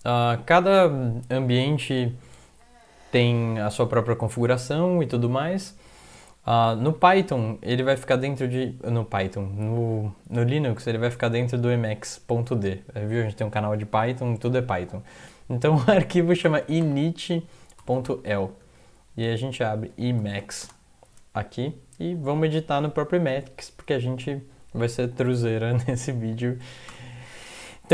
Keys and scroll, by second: 6.9 ctrl+l, 7.2-8.4 typing, 10.9 typing, 11.1 Tab, 16.2-20.9 typing, 18.6 Home, 21.4 End, 26.9 Return.